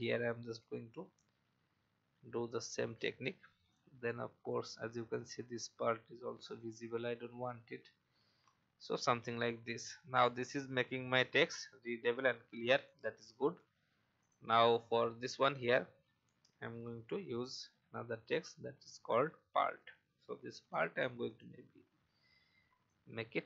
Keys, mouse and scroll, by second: 7.5 alt+scroll down 1, 8.2 alt+v, 8.7 alt+scroll down 1, 10.1-11.2 drag, 13.5 alt+scroll down 1, 14.2 click, 14.6 alt+scroll down 1, 15.2 click, 15.7-16.4 scroll up 1, 16.5 alt+scroll down 1, 17.5 click, 18.7-19.0 alt+scroll up 1, 20.5 i, 21.3 click, 22.0 typing, 22.9 shift+click.